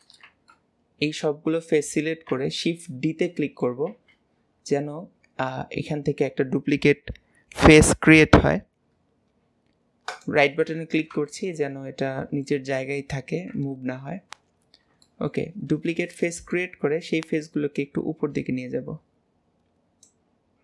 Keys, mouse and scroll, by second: 0.5-2.4 middle drag, 2.4 KP_1, 3.3 middle click, 3.9 shift+d, 12.5-13.5 middle drag, 13.6 KP_1, 14.5 scroll down 1, 14.6-15.0 scroll up 1, 15.0 shift+middle click, 15.6-16.1 scroll up 2, 16.1-17.8 shift+middle drag, 17.8 click.